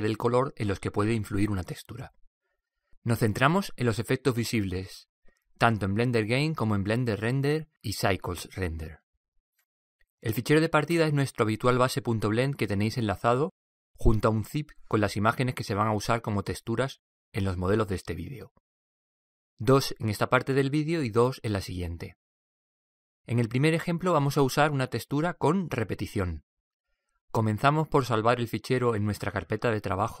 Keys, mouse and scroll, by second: 29.1-30.2 drag.